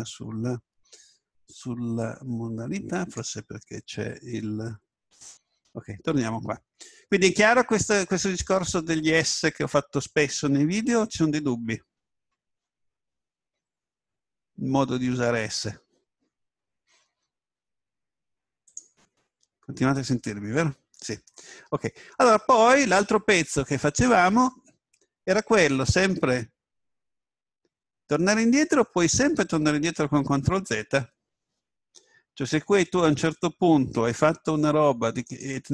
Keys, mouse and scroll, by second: 1.4 Tab, 3.0-5.3 drag, 6.2-6.6 scroll up 1, 6.6-7.8 scroll down 1, 7.8-9.9 middle drag, 35.3 right click.